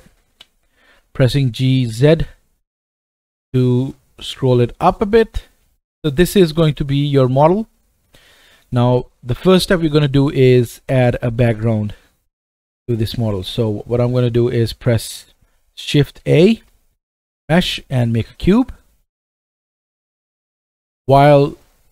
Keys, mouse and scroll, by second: 0.3-5.3 drag, 0.3 g, 5.3-7.1 middle drag, 7.1 click, 7.2-10.5 middle drag, 16.2 shift+a.